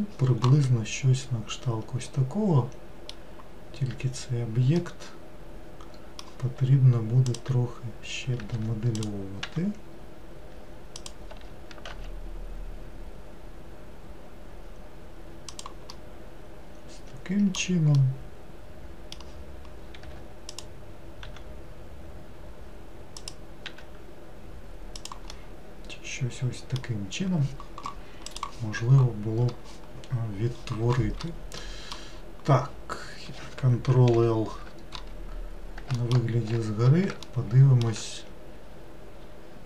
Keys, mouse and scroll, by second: 0.8-3.8 middle drag, 4.9-7.4 middle drag, 7.4 click, 8.6 3, 9.0 click, 9.5 e, 11.4 s, 16.0-20.6 middle drag, 20.6 click, 21.3 e, 23.7 s, 25.4-28.4 middle drag, 31.7 middle click, 32.2-34.0 scroll down 1, 34.2 ctrl+l, 36.1 alt+middle click, 37.4 shift+middle click, 38.3-39.6 scroll up 6.